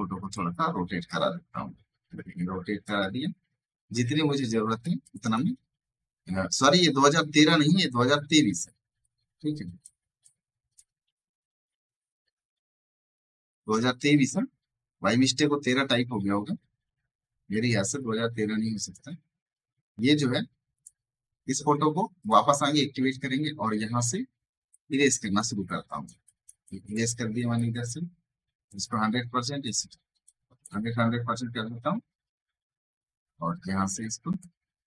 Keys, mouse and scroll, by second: 1.0-3.1 alt+drag, 3.1-4.9 ctrl+drag, 7.1 t, 8.9-13.0 drag, 14.4 v, 16.5-17.3 typing, 17.9 ctrl+right click, 18.7 ctrl+click, 20.7 ctrl+click, 21.4 ctrl+d, 22.1 click, 23.9 ], 24.6-31.0 drag, 31.0 \, 33.8 typing, 34.3-34.8 drag.